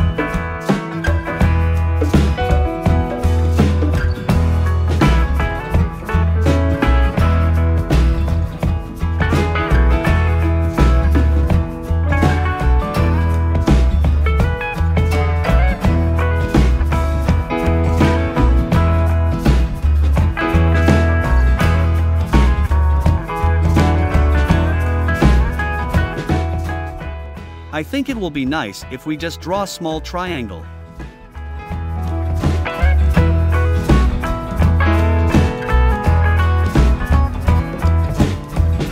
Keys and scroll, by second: 4.1 a, 36.5 i.